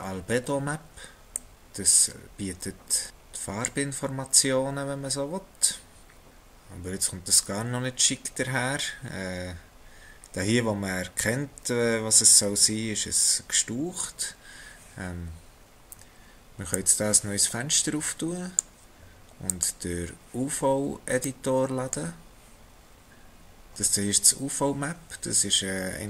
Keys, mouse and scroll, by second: 7.8-8.9 scroll up 1, 8.9-12.1 scroll up 3, 16.7 click, 19.4 click.